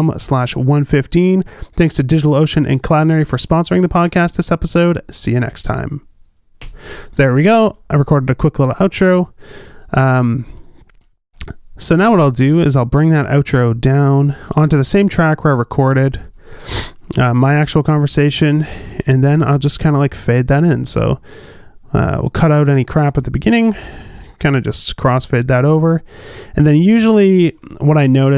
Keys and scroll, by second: 8.9 space, 18.3 q.